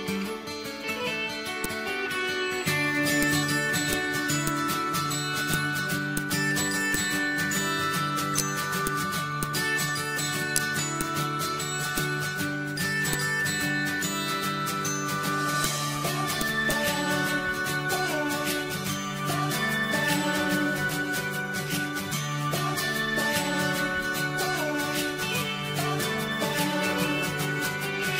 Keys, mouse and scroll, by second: 10.0 click.